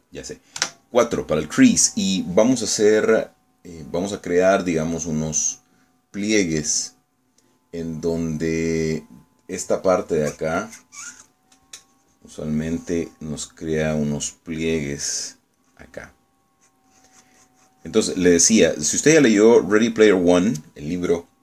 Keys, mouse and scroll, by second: 1.7 4, 11.2-12.6 drag, 13.0-15.4 drag, 15.7 middle click, 16.7 click, 17.6-20.7 drag, 20.9 middle click.